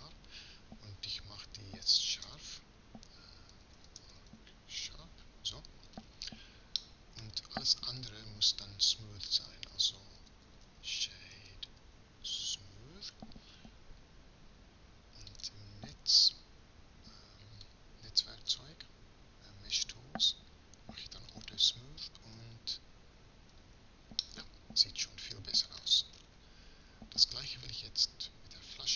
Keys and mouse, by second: 2.0 space, 7.2 a, 7.5 a, 9.9 space, 22.1 Tab, 23.3 z, 28.6 Tab.